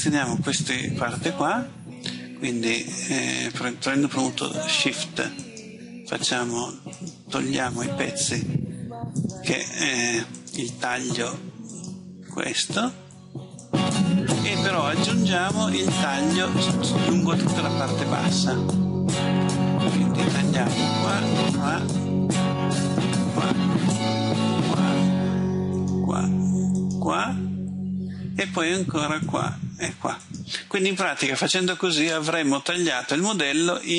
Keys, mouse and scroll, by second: 5.5 shift+right click, 7.0 shift+right click, 8.3 shift+right click, 9.2 shift+right click, 10.4 shift+right click, 11.8 shift+right click, 12.7 shift+right click, 13.7 shift+right click, 21.2 shift+right click, 22.9 shift+right click, 24.4 shift+right click, 25.8 shift+right click, 26.8 shift+right click, 29.3 shift+right click, 30.3 shift+right click, 32.1 middle click.